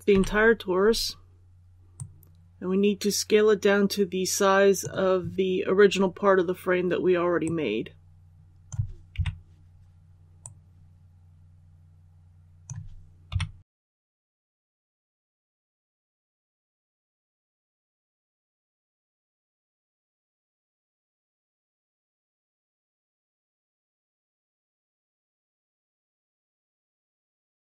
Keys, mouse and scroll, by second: 0.0 l, 1.9-8.6 drag, 9.1 KP_3, 10.3-12.6 drag, 13.2 KP_1, 14.3 scroll up 1, 15.1 shift+middle click, 16.2 shift+middle click, 17.3 shift+s, 19.6-23.6 drag, 24.0 scroll up 1, 25.2-27.2 scroll up 1, 27.2-27.6 drag.